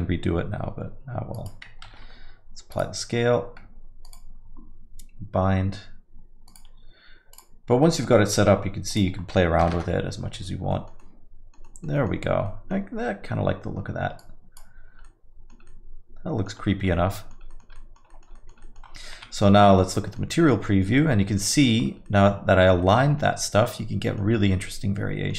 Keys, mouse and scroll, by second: 1.8 ctrl+a, 4.0 click, 6.5 click, 10.2 click, 10.7 alt+middle click, 11.0 alt+middle click, 11.6 alt+middle click, 12.0 middle click, 12.2 scroll up 3, 12.4 alt+middle click, 14.2 click, 15.0 alt+middle click, 15.7 alt+middle click, 16.7 scroll up 2, 16.9 alt+middle click, 17.5 middle click, 17.7 alt+middle click, 18.1 middle click, 18.3 alt+middle click, 18.6 middle click, 19.1-19.5 scroll down 4, 19.1 z, 20.0 alt+middle click, 20.3 middle click, 20.7 scroll up 2, 21.0 alt+middle click, 21.5 middle click, 21.8 scroll up 3, 22.1 alt+middle click, 22.8 middle click, 23.1 scroll down 1, 23.3 alt+middle click, 24.3 scroll down 2, 24.6 alt+middle click.